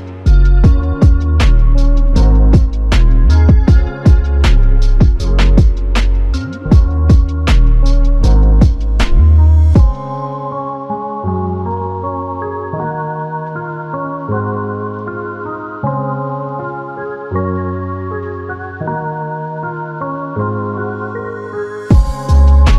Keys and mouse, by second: 5.4 ctrl+z, 6.5 alt+click, 14.7 shift+click, 19.9 alt+click.